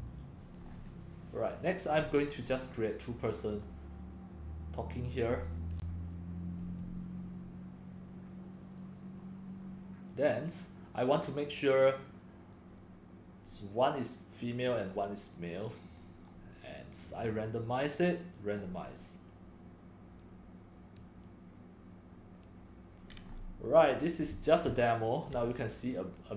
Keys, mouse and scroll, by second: 0.2 click, 2.0 click, 2.1 click, 2.2 click, 2.2 scroll, 2.2 scroll, 2.5 scroll, 2.5 scroll, 3.6 click, 6.5 click, 10.1-11.5 drag, 11.7-16.7 drag, 17.2 click, 18.1-22.7 drag, 23.3 scroll, 23.7 click, 24.4-25.3 typing, 25.1 click.